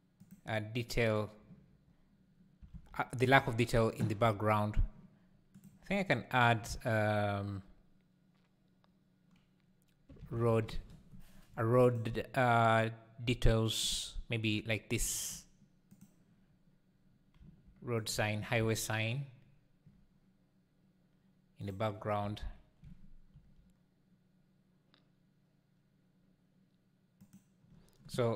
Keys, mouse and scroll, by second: 2.8 alt+a, 3.4 ctrl+s, 14.0-14.8 drag, 15.0-16.2 shift+right drag, 16.2-17.4 drag, 17.4 s, 19.3 r, 23.3 g.